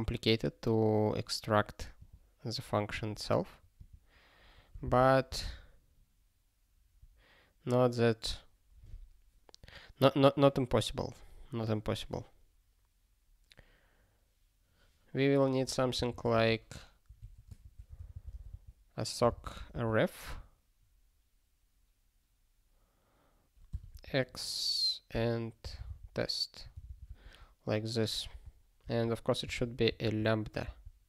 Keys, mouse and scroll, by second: 1.6 click, 3.8 click, 4.8 ctrl+b, 5.2 ctrl+b, 15.9 ctrl+n, 16.3 (, 17.1 BackSpace, 17.2 Tab, 17.6 (, 19.5 f, 19.7 space, 23.7 x, 23.9 space, 25.1 ', 26.9 ctrl+g, 27.1 ctrl+a, 30.0 alt+f, 30.6 alt+b.